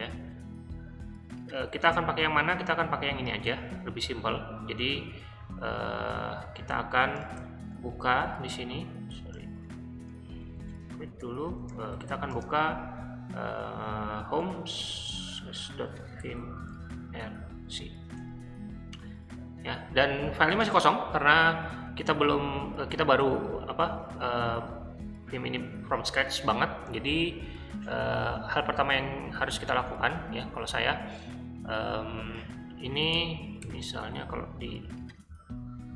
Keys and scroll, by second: 5.7 q, 7.4 shift+;, 9.1-12.8 typing, 14.0-18.6 typing, 33.6 i.